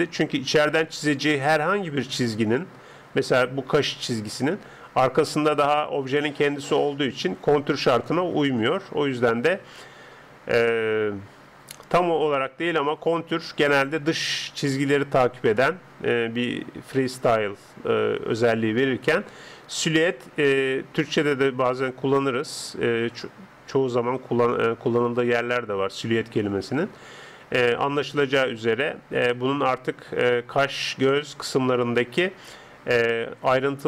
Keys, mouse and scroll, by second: 0.0 Escape, 2.6-5.2 middle drag, 7.8-29.6 middle drag.